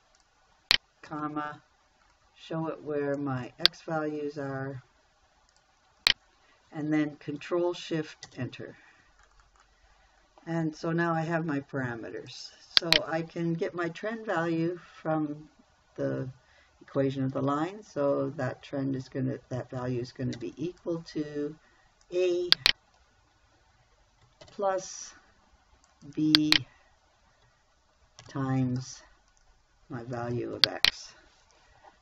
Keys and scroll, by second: 1.5 ,, 8.7 ctrl+shift+Return, 20.8 =, 24.9 shift+=, 28.7 shift+8.